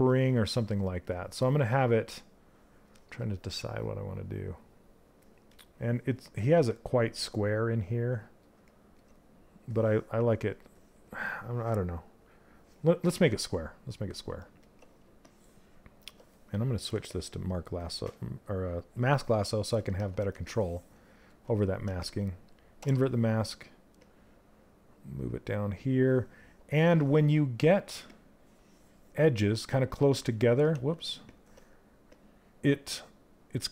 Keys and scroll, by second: 30.3 ctrl+z.